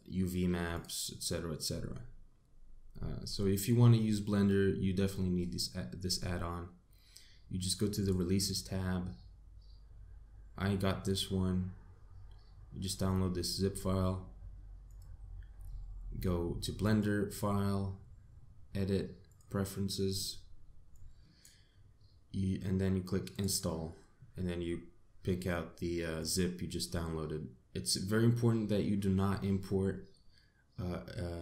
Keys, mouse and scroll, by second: 16.7 click.